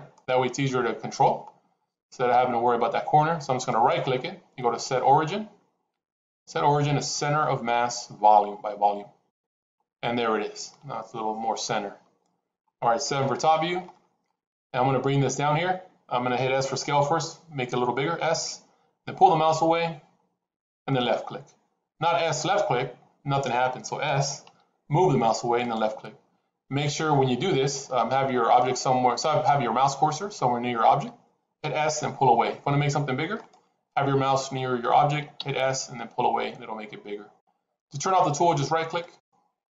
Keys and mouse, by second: 0.0-1.0 middle drag, 3.6-9.4 right drag, 10.1-11.5 middle drag, 13.0 KP_7, 17.0 s, 21.9 s, 24.0 s, 31.5 s, 35.3 s.